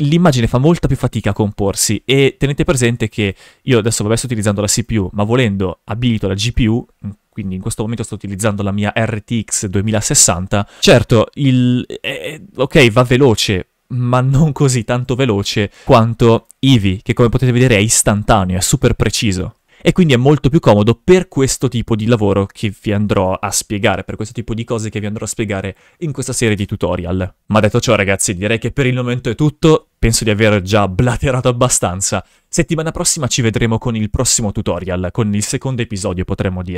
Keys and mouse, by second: 1.2 right click, 1.8 shift+f, 4.8-6.7 drag, 10.1 shift+f, 10.9 g, 15.1 right click, 15.8 click, 16.9 g, 19.2 right click, 19.7 shift+f.